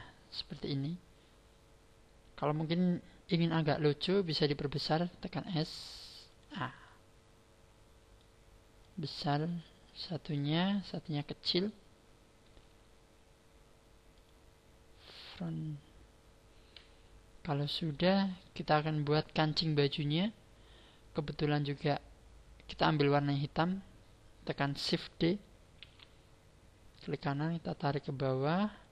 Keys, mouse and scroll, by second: 0.1-0.5 scroll down 4, 1.0 scroll down 2, 1.2-4.1 scroll up 5, 4.8 s, 6.4 click, 6.8 middle click, 8.8 click, 10.6 middle click, 14.1 click, 15.9-16.8 scroll down 4, 16.8-17.2 scroll down 5, 17.8 shift+middle click, 21.2 scroll up 6, 25.8 shift+d, 27.0 right click, 27.6 click.